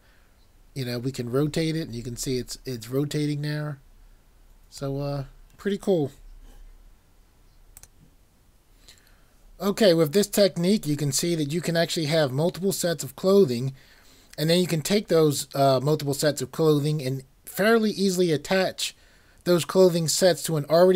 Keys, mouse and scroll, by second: 7.8 typing.